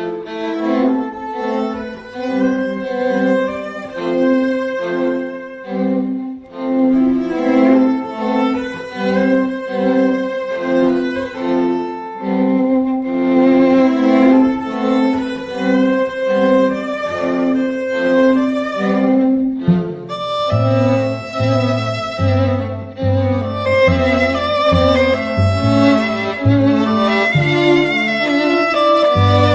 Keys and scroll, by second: 4.1 z.